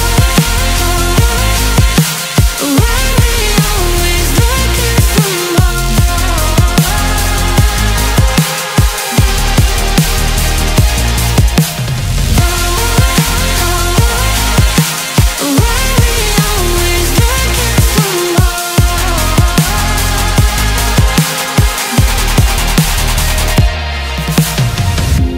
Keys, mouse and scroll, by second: 0.0-1.4 drag, 1.4-2.7 scroll up 11, 2.7-3.8 scroll down 10, 3.8 click, 4.3 click, 5.5-6.6 scroll down 3, 6.6-8.0 drag, 8.0-9.2 scroll up 4, 9.2-12.1 drag, 12.1-13.0 scroll up 9, 13.3-14.6 scroll down 9, 14.6-18.5 drag, 18.5-19.7 scroll up 14, 19.7-22.0 middle drag, 22.0 Tab, 22.7 scroll down 1.